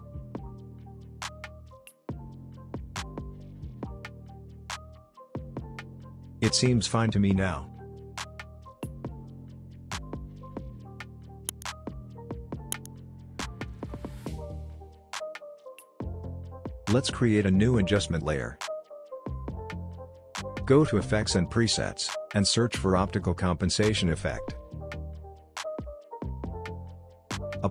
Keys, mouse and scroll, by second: 5.4 space, 7.8-9.6 scroll down 1, 9.7 scroll up 1, 10.1-10.8 scroll down 1, 10.8 space, 12.0-13.3 drag, 16.8 right click, 17.4 click, 22.9 click, 25.7-27.2 typing.